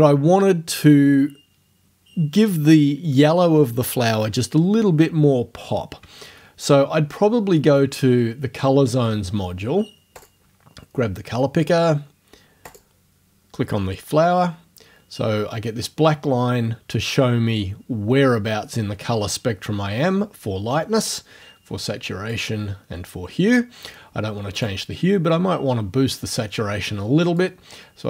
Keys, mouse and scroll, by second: 6.9 scroll down 1, 10.2 click, 12.7 click, 21.1 click, 22.3 click, 24.6 click, 27.4-28.0 drag.